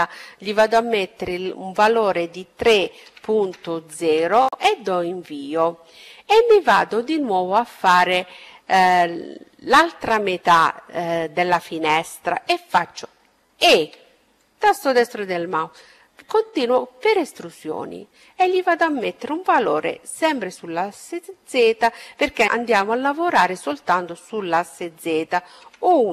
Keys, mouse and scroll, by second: 11.5 e, 14.2-17.9 drag.